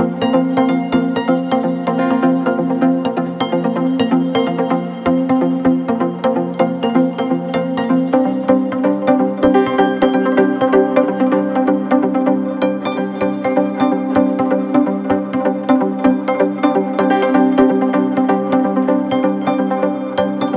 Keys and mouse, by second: 2.9 click, 5.1 click, 14.2-17.2 drag, 17.5 click, 18.6-20.0 drag.